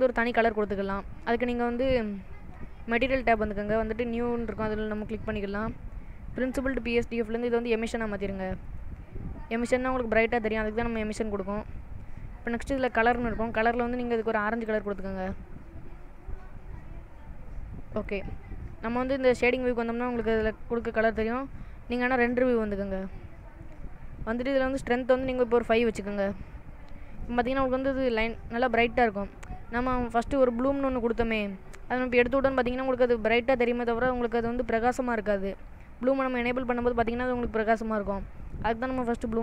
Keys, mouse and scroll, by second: 3.3 click, 4.9 click, 6.6 click, 13.3 click, 20.1 click, 22.3 click, 24.8 click, 27.2 click, 29.9 click, 30.9 click, 32.7 click, 36.5 click, 39.0 click.